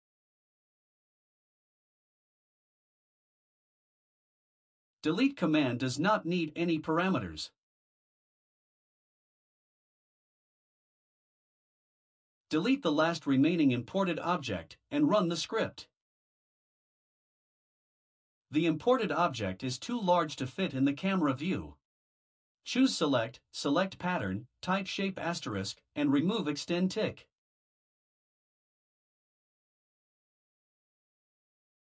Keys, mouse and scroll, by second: 1.3 Return, 2.3 Return, 3.4 ctrl+v, 5.4 click, 9.9 BackSpace, 12.6 click, 14.0 Delete, 17.7 click, 21.2 click, 23.8 click, 28.8 BackSpace.